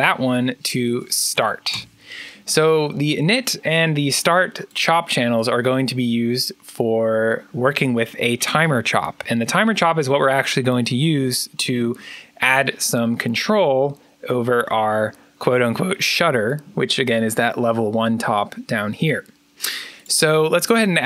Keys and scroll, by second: 0.4-1.7 typing, 20.8-21.0 typing.